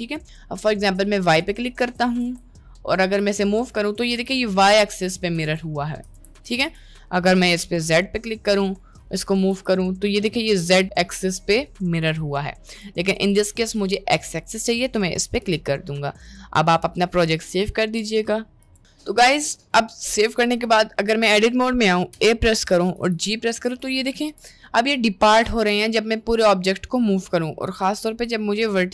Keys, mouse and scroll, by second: 0.6 middle click, 1.4 click, 1.8 Tab, 2.2 a, 2.8 middle click, 3.2 g, 4.0 middle click, 4.2 g, 5.6 Tab, 5.8 middle click, 6.2 ctrl+z, 6.4 ctrl+z, 8.0 click, 8.4 click, 9.4 b, 10.6 g, 12.7 click, 13.2 Tab, 13.6 middle click, 14.5 click, 15.2 middle click, 15.6 ctrl+s, 19.2 middle click, 19.7 Tab, 20.2 middle click, 22.2 a, 23.0 g, 24.4 g, 25.7 g, 27.8 1, 27.9 click, 28.2 g.